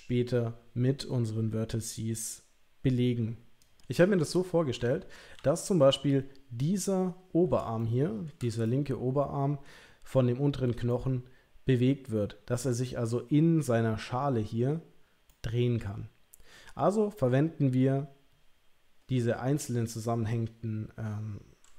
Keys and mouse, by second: 3.8-4.8 middle drag, 4.8 l, 5.3 l, 5.7 middle click, 7.8 shift+middle click, 8.6-9.6 middle drag, 10.9-13.1 middle drag, 15.3-16.8 middle drag.